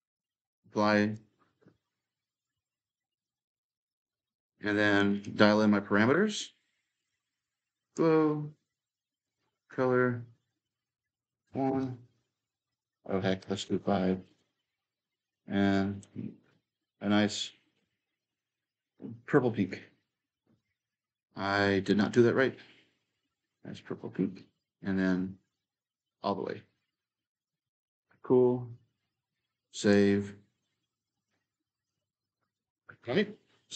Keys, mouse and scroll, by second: 0.0-2.9 drag, 3.0-11.3 drag, 11.3 1, 11.4 Tab, 12.5 click, 13.2 5, 13.5 Tab, 14.1-17.8 drag, 19.4-21.5 drag, 21.6-29.2 drag, 29.5-33.7 drag.